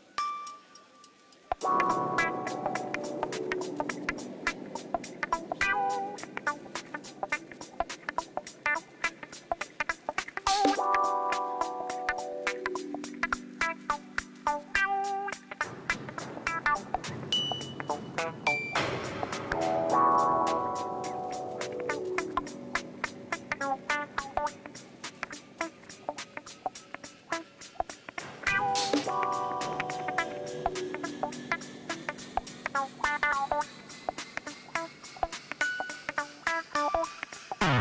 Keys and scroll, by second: 6.1-7.8 typing, 8.0 Return, 12.6 ctrl+shift+t, 20.0 u, 22.1 Tab, 26.4 Tab, 28.7 shift+z, 31.9 u, 34.7 shift+z, 37.6-37.8 typing.